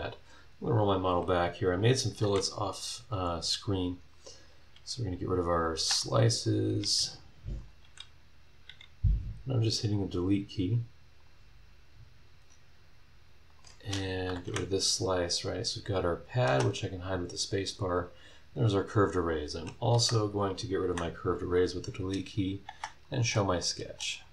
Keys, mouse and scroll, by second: 2.2 Delete, 2.8 click, 3.1 Delete, 3.8 click, 4.7 Delete, 5.6 click, 5.9 Delete, 6.4 click, 6.8 Delete, 7.6 click, 7.8 Delete, 8.7 Delete, 11.2 click, 13.6 click, 13.8-16.2 middle drag, 14.4 Delete, 16.2 click, 16.5 space, 19.1 click, 19.9 Delete, 20.6 click, 20.8 Delete, 22.4 click, 22.6 space, 23.0 click, 23.6 click, 23.8 space, 24.2 click.